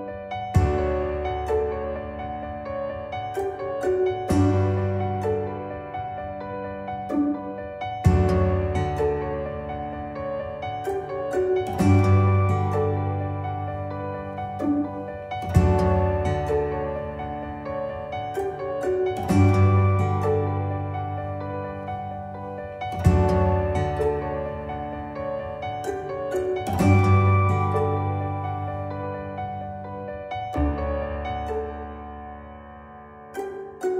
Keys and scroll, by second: 0.5 ctrl+z, 13.4 ctrl+z.